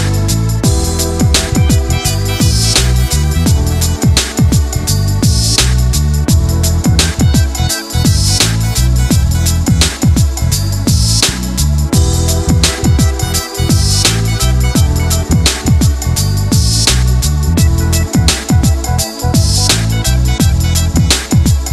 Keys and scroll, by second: 2.8 ctrl+d, 10.3 ctrl+g, 15.0 ctrl+z.